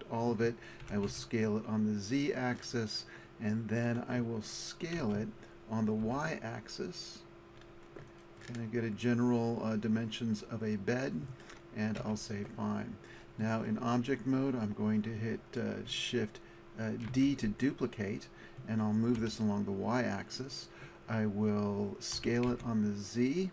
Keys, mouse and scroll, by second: 0.8 s, 5.0 s, 8.2-10.2 drag, 12.0 Tab, 13.1-15.0 drag, 17.1 shift+d, 20.5 click, 22.2 s.